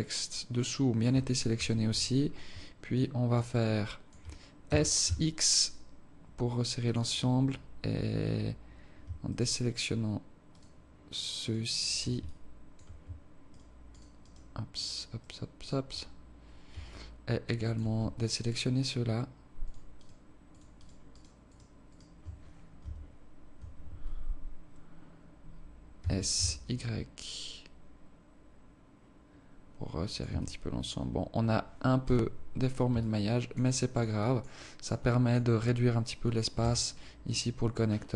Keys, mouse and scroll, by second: 1.6 KP_7, 2.2 scroll up 1, 2.4 scroll down 1, 2.9 alt+shift+click, 3.7 alt+shift+click, 4.6 s, 9.3 shift+right click, 10.6 shift+right click, 11.4 shift+right click, 11.8 shift+right click, 12.2 alt+click, 13.5 shift+right click, 14.0 shift+right click, 14.2 shift+right click, 14.8 shift+right click, 15.2 shift+right click, 15.6 shift+right click, 16.9 alt+click, 18.4 shift+right click, 20.0 shift+right click, 20.5 shift+right click, 20.8 shift+right click, 21.1 shift+right click, 21.4 shift+right click, 21.9 shift+right click, 22.8 KP_1, 23.6 KP_7, 26.0 s, 30.3 Tab, 32.0 z, 33.0 alt+click, 33.7 alt+click, 34.2 alt+click, 34.6 alt+click, 35.0 alt+click, 36.6 KP_0.